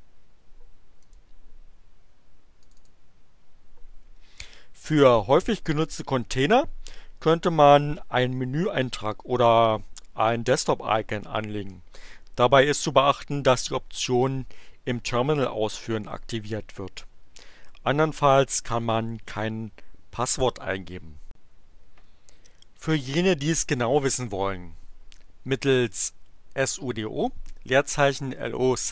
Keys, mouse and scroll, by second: 1.0 click, 2.6 click.